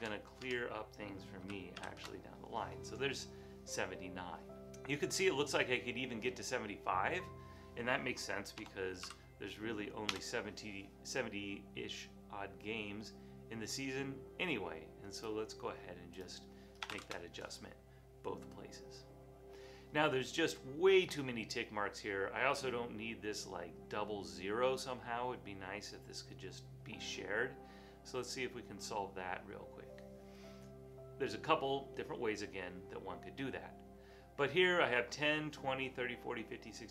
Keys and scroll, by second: 0.0 Tab, 0.5 Tab, 1.2-2.3 typing, 8.7-10.6 typing, 16.9 typing, 17.1 Return.